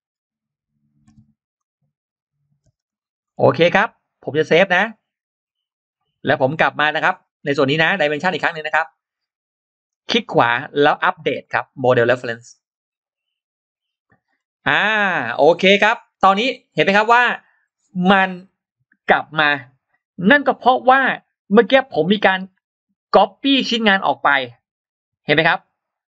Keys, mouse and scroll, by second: 1.4 click, 2.2 click, 2.7 click, 2.7 space, 3.1 middle click, 4.6 click, 5.5 click, 8.1 click, 9.7 right click, 12.1 click, 14.1-14.4 scroll down 2, 15.2 click, 15.6 scroll up 2.